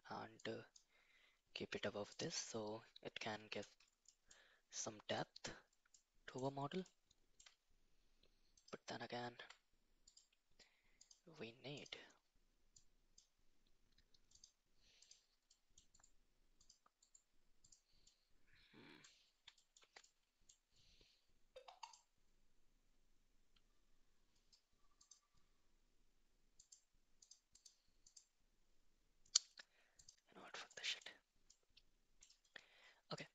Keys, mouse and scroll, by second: 0.3-0.7 drag, 2.1 click, 2.4-3.6 middle drag, 4.0 middle drag, 5.1 middle drag, 5.9 middle click, 6.8-7.3 shift+middle drag, 8.5 click, 10.0 click, 10.9 click, 11.7 click, 12.7 click, 14.3 click, 15.0 click, 15.4 middle click, 16.0 right click, 16.9 right click, 18.1 middle click, 19.5 shift+middle click, 20.0 middle click, 24.9 click, 26.5 click, 27.1 click, 27.5 click, 28.0 click, 30.0 click, 30.6 middle drag, 31.4 middle click, 33.1 shift+middle drag.